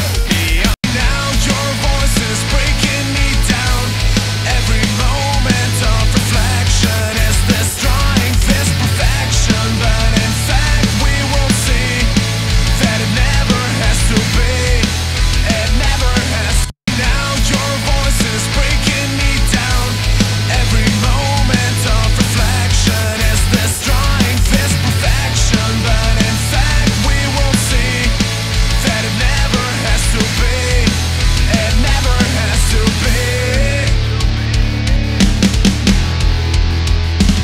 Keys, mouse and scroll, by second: 3.1 click, 14.6 click, 16.6 space, 20.0 click, 28.0 click.